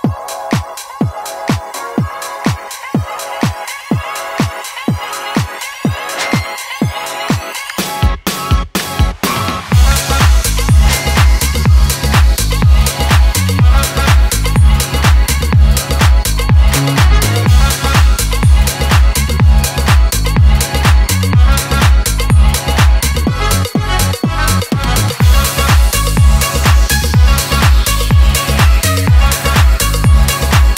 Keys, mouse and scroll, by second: 3.0-3.9 middle drag, 4.4-8.0 drag, 10.3 click, 11.6 scroll up 1, 12.7 click, 13.0 scroll up 1, 13.6 scroll down 1, 14.4-15.7 scroll up 1, 15.7-25.7 drag, 27.3 shift+click, 28.3 u, 30.5-30.7 drag.